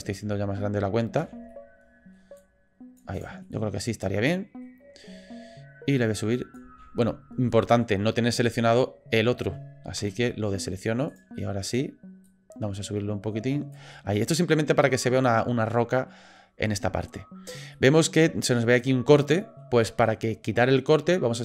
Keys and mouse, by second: 3.4-4.6 middle drag, 5.9 click, 6.7 ctrl+z, 7.5 click, 11.3 click, 12.3-13.7 drag, 13.9-16.1 middle drag, 17.0 middle click, 17.8 middle click, 18.6 middle click, 19.1 middle click, 19.8 middle click.